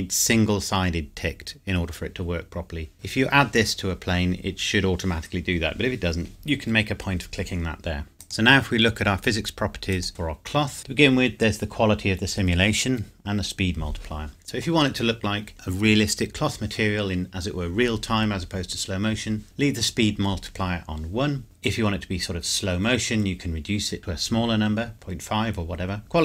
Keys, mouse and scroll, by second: 4.0 scroll up 1, 8.1 click.